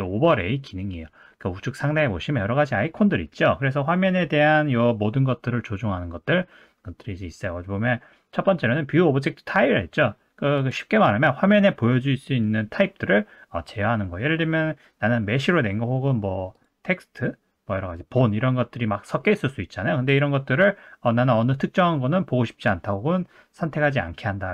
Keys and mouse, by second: 10.7-15.4 drag, 16.7-19.2 drag, 20.1-24.5 drag.